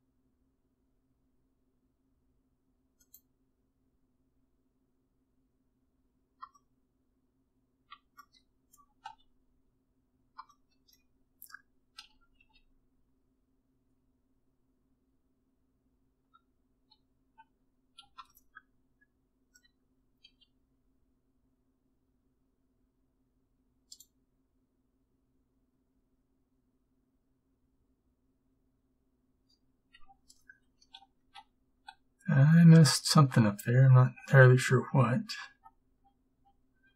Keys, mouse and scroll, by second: 6.6 middle click, 7.9 middle click, 9.1 a, 12.1 a, 12.5 a, 20.4 b, 20.4 g, 30.9 ctrl+z, 31.3 ctrl+z, 31.8 ctrl+z, 32.3 ctrl+z, 32.8 ctrl+z, 33.3 ctrl+z, 33.7 ctrl+z, 34.2 ctrl+z, 34.6 ctrl+z, 35.1 ctrl+z, 35.6 ctrl+z, 36.1 ctrl+z, 36.4 ctrl+z, 36.8 ctrl+z.